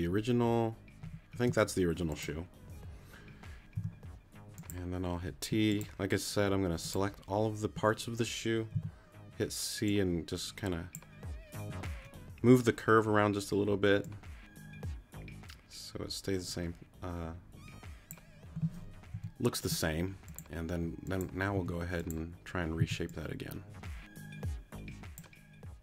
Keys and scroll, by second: 3.8 t, 9.3 c, 19.1 t, 21.5 t, 22.8 c.